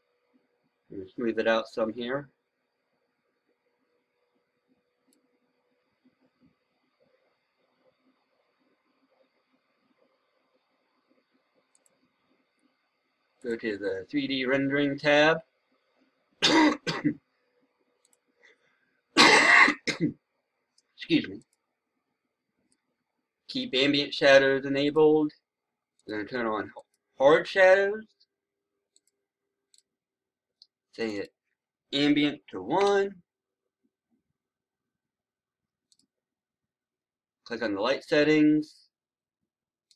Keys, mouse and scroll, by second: 32.3 KP_1, 35.8 click.